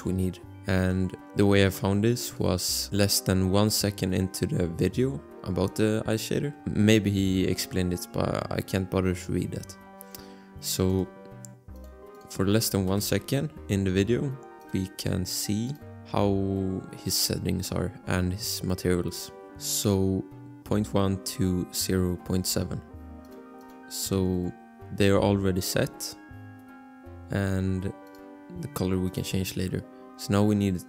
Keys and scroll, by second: 13.1 BackSpace, 22.6 Escape.